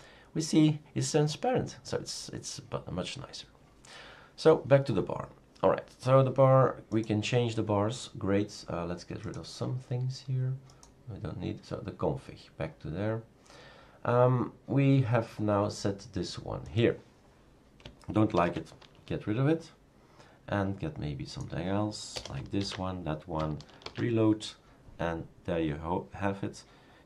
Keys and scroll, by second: 18.4 #, 22.2 BackSpace, 22.6 ctrl+s, 23.8 shift+super+r.